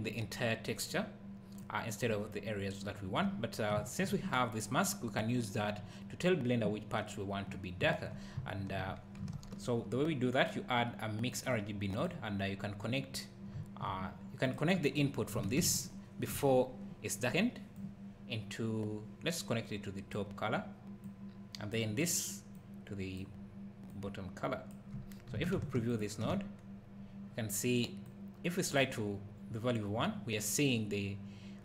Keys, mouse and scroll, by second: 1.6 click, 1.8 click, 3.3 scroll down 1, 9.3 shift+a, 12.0 click, 12.5-13.5 scroll up 1, 14.4 click, 15.7 ctrl+shift+click, 17.8 click, 21.2 click, 22.6 click, 22.6 click, 23.9 click, 25.9 ctrl+shift+click, 27.0-28.1 scroll up 1, 28.1 click.